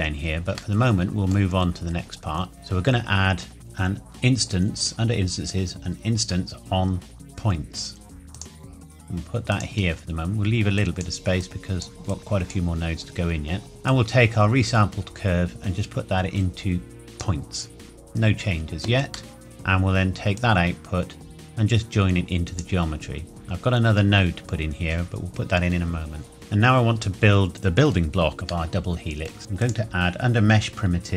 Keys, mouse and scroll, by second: 1.8-3.5 scroll up 1, 8.3 click, 9.8-10.8 scroll down 1, 10.8 click, 13.0-13.7 scroll up 1, 13.9 click, 19.3 middle click, 19.4 click, 26.3 middle click, 29.6 click.